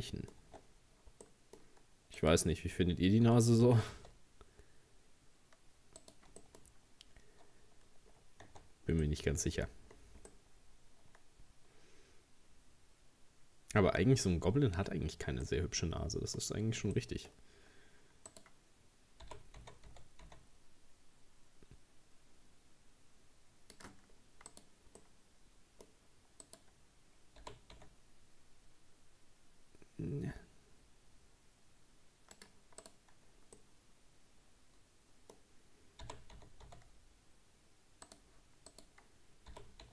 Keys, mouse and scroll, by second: 0.5 Tab, 1.3 middle click, 2.2 right click, 3.3 g, 6.4-6.9 scroll up 2, 6.4 middle click, 7.9-8.5 scroll down 4, 8.5 Tab, 9.1 middle click, 9.9-10.3 scroll down 2, 10.3-13.3 middle drag, 15.5-16.5 middle drag, 16.5-17.0 scroll up 2, 17.0 shift+middle click, 17.7-18.3 scroll up 1, 18.3 right click, 19.3 g, 24.2-24.5 scroll down 2, 24.5 right click, 25.0-26.5 middle drag, 26.5 right click, 27.4 g, 32.9 right click, 33.6-36.0 middle drag, 36.0 g, 38.7 right click, 39.5 g.